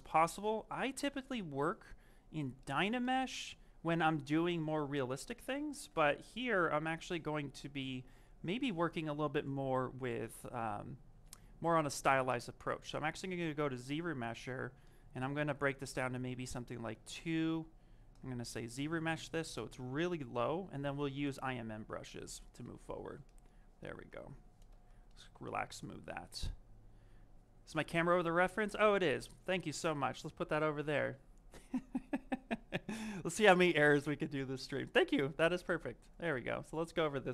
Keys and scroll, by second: 4.9 shift+f, 6.0 s, 21.7 shift+f.